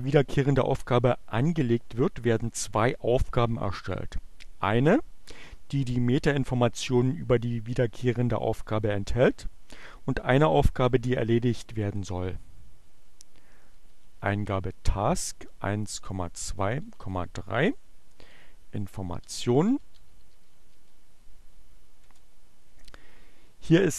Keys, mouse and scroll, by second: 11.7 t, 14.0-15.0 typing, 16.6-17.4 typing, 18.7-21.2 typing, 21.9 Return.